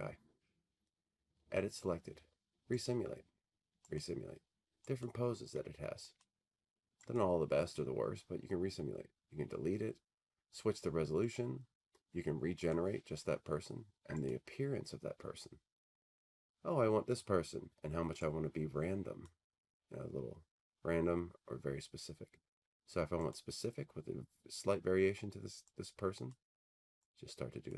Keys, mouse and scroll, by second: 3.0 click, 3.9 click, 6.4 click, 7.5 click, 12.9 click, 14.4 click, 19.4 click, 23.4 click, 26.3 click.